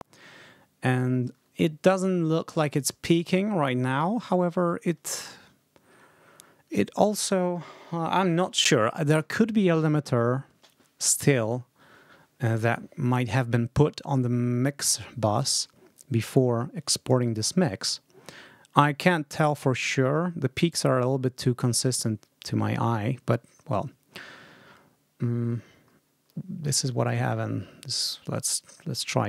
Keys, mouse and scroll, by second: 0.2-1.0 ctrl+scroll up 4, 3.9-4.5 scroll down 3, 16.1-17.2 drag, 17.7-18.0 ctrl+scroll up 2, 18.3-18.7 ctrl+scroll down 2, 20.4-21.4 ctrl+scroll up 4, 21.5-22.4 ctrl+scroll down 2, 23.4-23.9 ctrl+scroll up 2, 25.7 ctrl+scroll down 2, 28.0-28.3 ctrl+scroll up 2, 28.6 ctrl+scroll down 2.